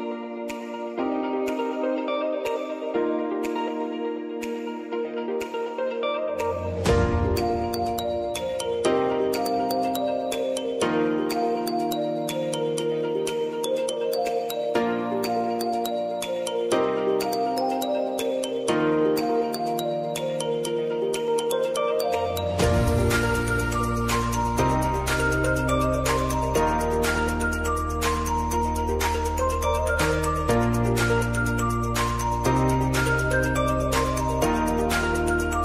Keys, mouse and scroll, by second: 2.9 space, 3.5-6.7 drag, 8.0 space, 10.5 space, 11.0 click, 11.5 space, 17.9 -, 18.1 space, 18.5 click, 18.9 space, 20.2-23.4 drag, 24.3 n, 25.9-28.0 typing, 30.4 click, 30.6 s, 31.4 click, 34.7 Return.